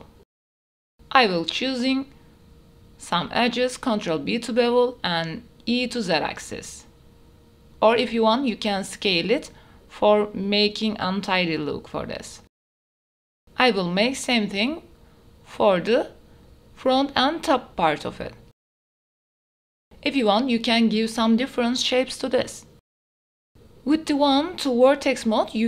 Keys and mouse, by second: 0.1 shift+click, 0.4 click, 0.4 right click, 0.7 ctrl+b, 1.8 shift+click, 2.4 e, 3.8 shift+click, 4.4 middle click, 5.2 shift+click, 5.4 ctrl+b, 5.8 shift+click, 6.0 e, 6.3 Tab, 6.4 click, 6.6 Tab, 6.6 click, 7.1 shift+click, 7.3 ctrl+b, 7.8 e, 8.3 click, 8.4 shift+click, 9.2 ctrl+b, 9.7 e, 10.2 click, 10.9 ctrl+b, 11.4 e, 11.8 click, 12.4 ctrl+b, 12.6 e, 12.8 click, 12.8 Tab, 13.0 click, 13.4 Tab, 14.8 shift+click, 15.1 middle click, 15.8 click, 16.2 shift+click, 18.2 ctrl+b, 19.1 shift+click, 19.4 e, 19.8 alt+s, 20.4 Tab, 20.7 Tab, 21.0 shift+click, 22.6 ctrl+b, 22.9 e, 23.0 alt+s, 23.4 Tab, 23.4 click, 23.5 middle click, 23.6 Tab, 23.6 click, 23.6 middle click, 23.6 right click, 23.8 click, 24.5 ctrl+b, 24.8 shift+click, 24.8 shift+middle click, 24.8 shift+right click, 25.0 e, 25.2 alt+s.